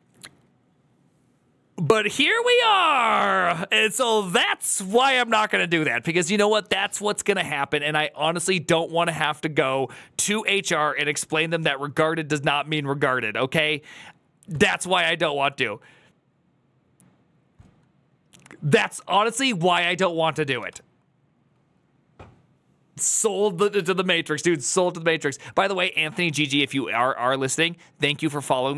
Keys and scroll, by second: 20.5 BackSpace.